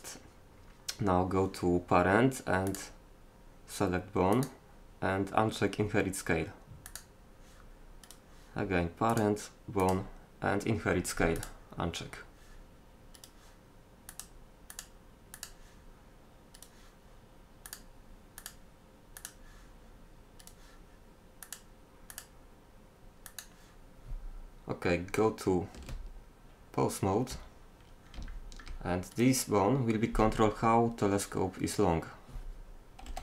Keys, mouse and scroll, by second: 2.7-4.6 drag, 6.9-8.1 drag, 10.9 click, 25.9 Tab, 29.2-30.7 right drag, 33.1 g.